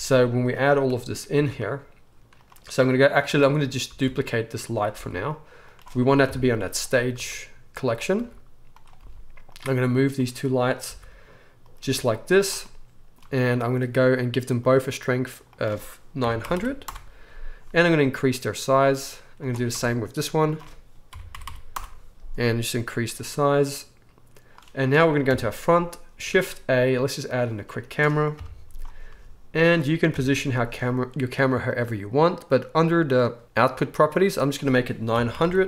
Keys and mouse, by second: 1.3 r, 3.9 shift+d, 4.9 r, 6.2-7.9 drag, 6.2 KP_7, 7.1 r, 7.9-10.1 middle drag, 8.1 r, 9.0 g, 10.1 click, 10.2-15.5 middle drag, 10.8 r, 11.8 g, 15.5-18.8 drag, 16.5 0, 18.0 s, 18.8-20.4 middle drag, 20.4-29.7 drag, 21.4 0, 25.2 KP_1, 26.3 shift+a, 28.4 KP_3, 29.1 g, 29.7-34.4 middle drag, 30.1 KP_0, 34.4-35.6 drag, 35.4 0.